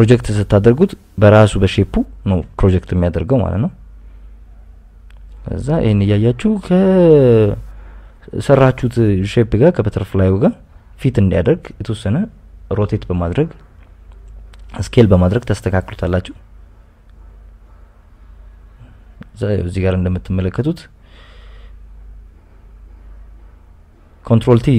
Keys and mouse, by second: 0.4 click, 1.6 a, 2.3 KP_Subtract, 2.4 KP_Subtract, 3.0 s, 3.6 x, 5.9 KP_Add, 6.0 KP_Add, 6.8 g, 7.4 x, 8.3 click, 8.8 KP_Subtract, 9.9 s, 10.1 x, 10.3 y, 12.5 click, 13.0 s, 13.1 x, 15.5 click, 17.5 click, 18.6 click, 19.3 click, 20.5 ctrl+t, 21.0 click, 21.9 click, 22.4 click, 23.0-23.4 KP_Add, 23.9 KP_Add, 23.9 click.